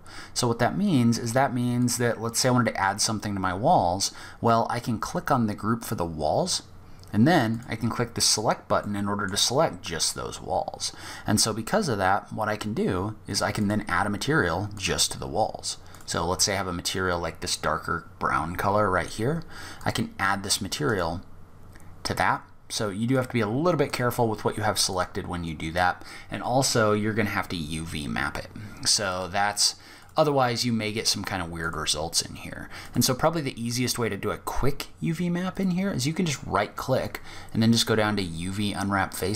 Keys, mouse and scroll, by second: 1.0 click, 6.7 click, 8.0 middle click, 8.8 scroll up 1, 12.7 click, 13.9 click, 16.5-16.9 scroll up 3, 17.2-19.0 scroll down 3, 19.0 click, 22.3 click, 23.0 click, 24.1 click, 28.2 click, 30.8 click, 34.7 right click.